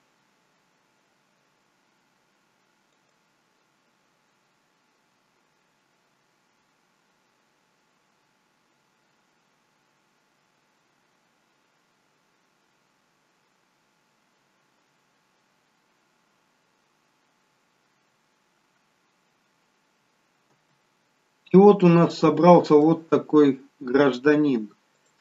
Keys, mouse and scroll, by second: 3.1 click, 20.7 space, 21.5 scroll up 2, 21.8 middle click, 23.2 scroll down 1.